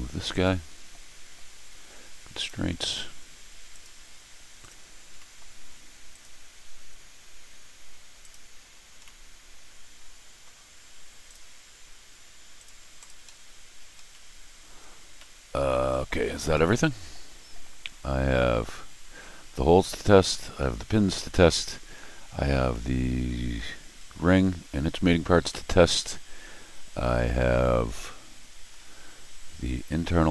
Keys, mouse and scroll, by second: 0.3 click, 2.3 click, 3.7 click, 4.6 click, 5.1 middle click, 6.1 click, 8.2 click, 9.0-10.4 middle drag, 11.2 click, 12.5 click, 13.0 click, 13.2 scroll down 1, 14.0 scroll down 1, 14.1 middle click, 15.1 scroll up 1, 15.1 middle click, 16.5-20.3 middle drag, 21.1 scroll up 2, 21.1 middle click, 22.2 scroll up 2, 22.5 scroll down 2, 22.6 scroll up 2, 25.5-28.7 middle drag, 29.2-29.9 scroll up 1.